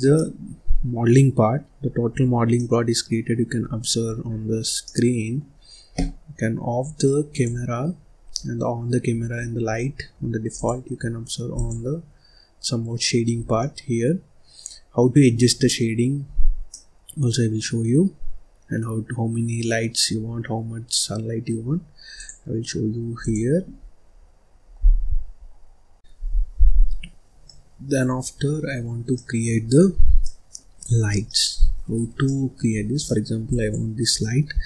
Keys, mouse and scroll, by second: 1.6-2.0 scroll down 3, 2.0-2.4 scroll up 4, 2.4-3.5 middle drag, 3.5-4.0 scroll down 5, 4.0-4.7 scroll up 4, 4.7-6.7 middle drag, 6.7-7.2 scroll up 2, 7.2 click, 7.9-9.0 scroll down 7, 9.0 scroll up 1, 9.3-9.6 scroll down 1, 9.6-10.2 scroll up 1, 10.4 click, 12.6 click, 13.4 scroll down 1, 13.5-15.2 middle drag, 15.2-15.6 scroll down 2, 15.6 middle click, 16.2-16.6 scroll up 2, 16.6-19.6 middle drag, 22.0-23.7 drag, 23.7 scroll down 1, 23.9-25.9 scroll up 1, 26.4-26.9 scroll down 3, 26.9-27.4 scroll up 2, 27.4 middle click, 28.1-28.5 scroll down 3, 28.5-29.1 scroll up 2, 29.1 middle click, 29.8-30.2 scroll up 1, 30.2 middle click, 30.8 scroll up 3, 31.0 scroll down 2, 31.2 middle click, 31.7-32.2 scroll down 1, 32.2 middle click, 32.6-33.0 scroll up 1, 33.0 middle click, 33.4 click, 34.1 middle click.